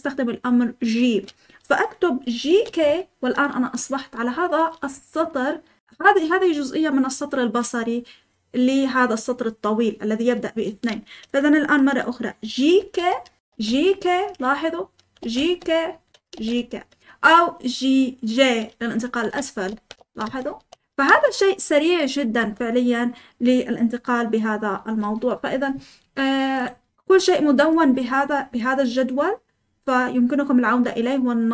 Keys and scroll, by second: 2.2-3.1 typing, 12.5-17.0 typing, 18.9-21.8 typing, 22.3 Escape.